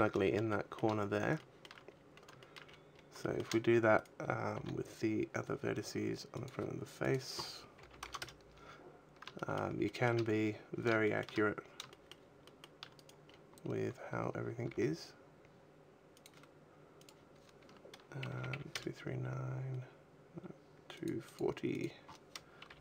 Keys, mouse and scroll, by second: 0.4 shift+middle click, 0.4 shift+scroll up 1, 0.9 scroll down 1, 1.2 shift+middle click, 1.7-2.3 scroll down 4, 2.3 shift+middle click, 2.5-3.1 scroll up 9, 3.1 shift+middle click, 3.8 right click, 4.4 g, 6.1 click, 6.8 click, 8.7-9.1 scroll down 5, 9.2 shift+middle click, 9.6 shift+middle click, 10.9 shift+middle click, 11.8 shift+middle click, 12.3 shift+middle click, 12.8 right click, 13.1-13.9 scroll up 4, 13.9-14.3 scroll up 4, 14.7 g, 16.1 click, 16.9 click, 20.8 click, 21.1 click, 21.6 click.